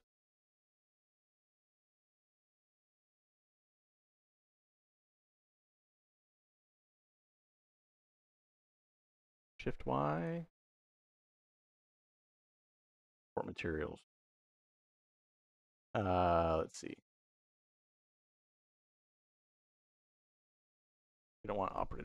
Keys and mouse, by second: 4.6-5.2 shift+drag, 5.7 click, 6.4-7.5 drag, 8.9 click, 10.0 click, 11.2 click, 12.0 click, 21.5-22.0 drag.